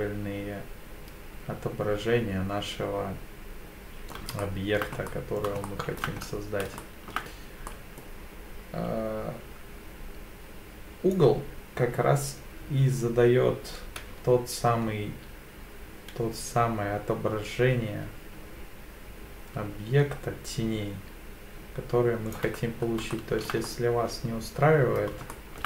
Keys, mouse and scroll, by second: 4.4-4.8 shift+middle drag, 5.1-5.4 middle drag, 5.6-6.0 shift+middle drag, 6.2-6.6 scroll up 2, 6.8-7.1 shift+middle drag, 7.7-8.0 middle drag, 11.1-22.4 drag, 22.6-23.0 scroll down 2, 23.1-23.5 shift+middle drag, 23.7-25.0 middle drag, 25.3 shift+middle drag.